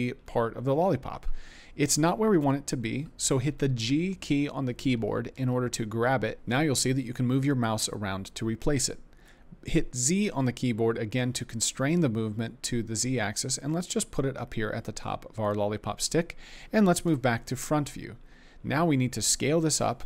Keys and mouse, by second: 0.2 middle click, 5.3 g, 10.2 z, 15.4 click, 17.1 KP_1.